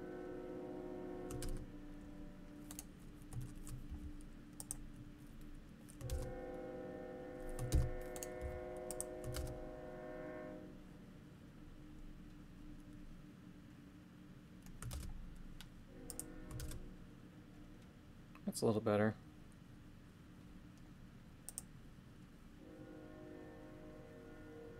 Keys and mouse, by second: 1.4 shift+space, 2.7 right click, 3.9 g, 4.6 click, 6.1 shift+space, 7.7 shift+space, 8.2 right click, 8.4 g, 8.9 click, 9.4 shift+space, 15.0 shift+space, 16.1 click, 16.7 shift+space, 21.5 click.